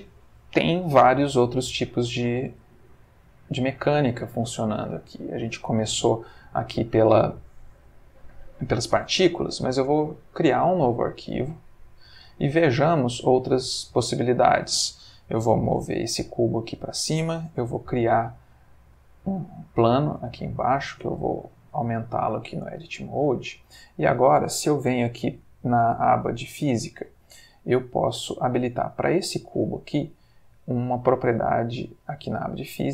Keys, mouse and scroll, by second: 1.1-4.2 middle drag, 9.8 click, 10.8 click, 12.0 click, 13.0-14.4 middle drag, 15.4 g, 15.9 z, 16.6 click, 17.5 shift+a, 19.2 click, 20.5 middle click, 20.9 Tab, 21.2 s, 22.4 click, 22.7 Tab, 23.0-23.5 middle drag, 23.8 click, 26.2 click, 27.5-28.9 middle drag, 28.9-31.9 scroll up 1.